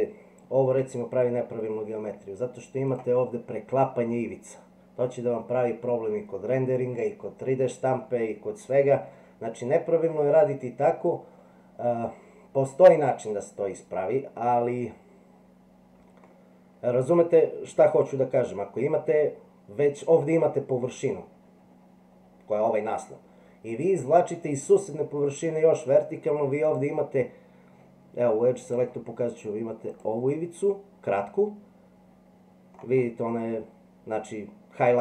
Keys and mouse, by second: 0.8 e, 16.3-18.0 middle drag, 26.6 click, 28.6 click, 29.9 click.